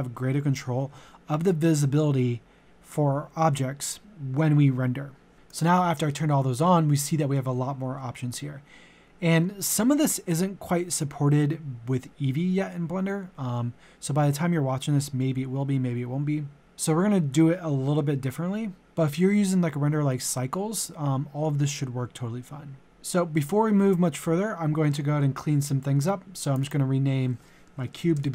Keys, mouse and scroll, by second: 27.9-28.3 typing.